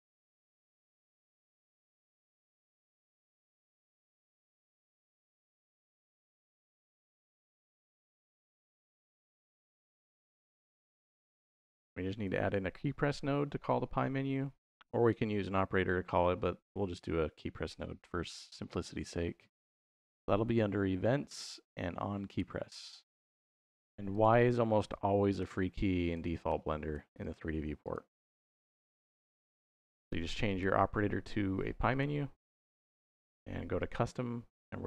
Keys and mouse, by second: 2.0 click, 3.1 middle click, 5.0-6.1 drag, 6.2-9.9 drag, 12.1 shift+a, 23.9 click, 25.2 y, 25.9 click, 26.3 y, 26.8 y, 27.1 drag, 28.0 y, 28.3 click, 30.3-32.0 drag, 32.8-33.9 drag.